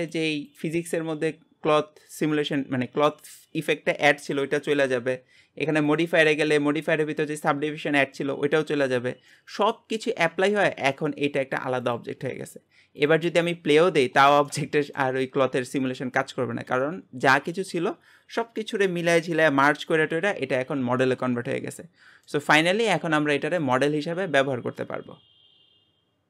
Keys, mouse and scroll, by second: 9.4-10.4 middle drag, 10.4 g, 13.0 click, 13.3 space, 13.8 scroll down 4, 14.5 shift+middle click, 15.2-16.7 scroll up 2, 16.7 space, 21.2-22.6 middle drag, 22.6 click, 22.8 g.